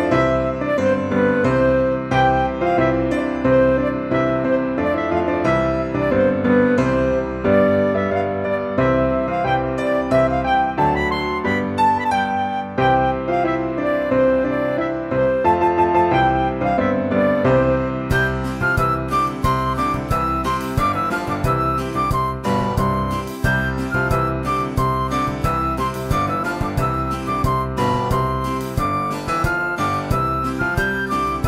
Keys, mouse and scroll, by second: 0.5 click, 1.1 click, 1.8 click, 2.1 click, 4.0 click, 4.6 click, 5.4 click, 6.4 Tab, 6.8 ctrl+r, 7.7 click, 8.1 click, 9.5 ctrl+r, 10.6 click, 12.1 ctrl+r, 13.6 click, 14.2 Tab, 15.5 click, 15.9 click, 17.0 drag, 17.4-17.8 scroll down 1, 17.8-18.5 drag, 18.5-19.6 scroll down 12, 19.6 drag, 20.1-20.6 scroll down 5, 20.6 click, 21.5-22.0 scroll down 2, 22.0 click, 22.2-23.5 scroll down 8, 22.7 click, 23.5 click, 25.0 shift+a, 27.4 click, 29.2 click, 29.9 drag.